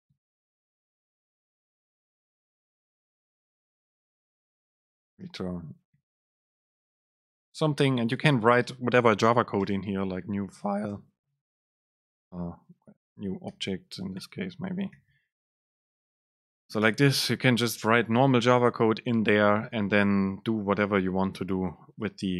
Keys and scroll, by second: 1.8 Down, 4.2 End, 4.4 BackSpace, 8.2 Up, 8.5 End, 8.7 Return, 11.0 Return, 11.0 super+space, 12.0 super+t, 12.8 Right, 13.3 Left, 13.6 BackSpace, 15.7 BackSpace, 15.8 super+space, 17.8 shift+Left, 18.7 Right, 20.3 Left, 21.7 Left, 21.8 super+space.